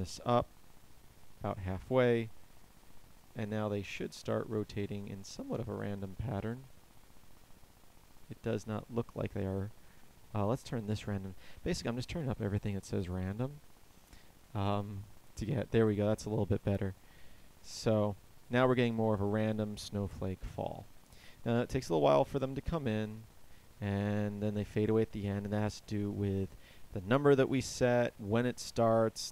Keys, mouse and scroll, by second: 1.9 alt+a, 9.3 Escape, 13.6 alt+a.